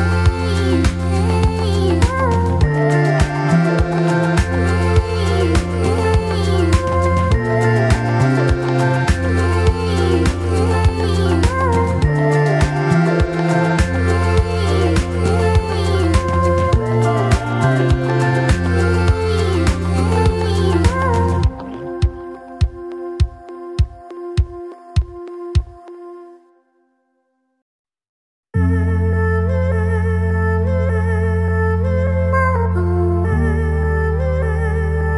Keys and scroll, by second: 0.4-2.1 typing, 3.1 F4, 4.2 1, 5.9 2, 7.6 1, 10.3 2, 14.0 2, 14.2 F4, 15.0 F4, 15.6 F4, 18.9 F4, 19.5 alt+F4, 20.5 F4, 20.8 F4, 20.9 2, 21.9 ctrl+r, 22.2 ctrl+c, 24.2 2, 25.6 ctrl+r, 25.7 ctrl+c, 26.1 Return, 26.8 ctrl+r, 26.9 ctrl+c, 28.5 2, 29.1 F4, 34.1 F4.